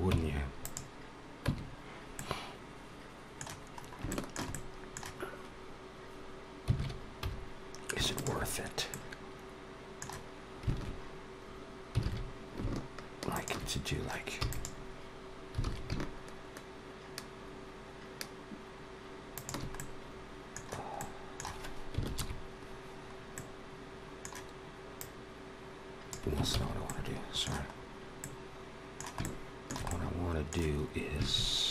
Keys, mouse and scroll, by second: 0.5 click, 1.3 Tab, 2.0 middle click, 3.6 scroll up 2, 3.9 shift+middle click, 4.4 middle click, 6.6 alt+a, 7.0 3, 8.0 alt+shift+click, 8.8 middle click, 11.9 alt+a, 13.1 alt+shift+click, 14.2 e, 15.5 alt+s, 19.6 middle click, 20.7 middle click, 21.9 ctrl+KP_Add, 23.2 middle click, 24.8 click, 26.3 ctrl+z, 26.7 middle click, 27.6 scroll up 2, 28.1 middle click, 29.1 shift+middle click, 29.7 middle click.